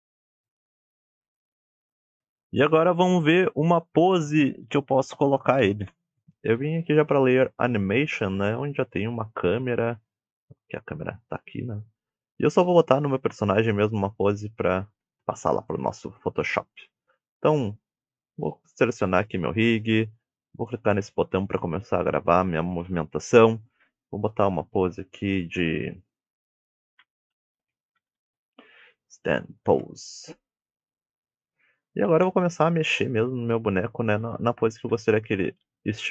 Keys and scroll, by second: 0.2 Tab, 0.5 Tab, 0.7 alt+z.